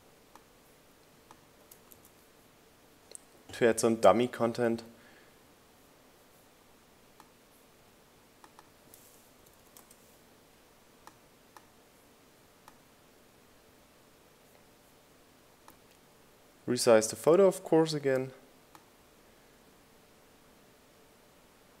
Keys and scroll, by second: 3.1 super+v, 10.4 5, 10.8 Return.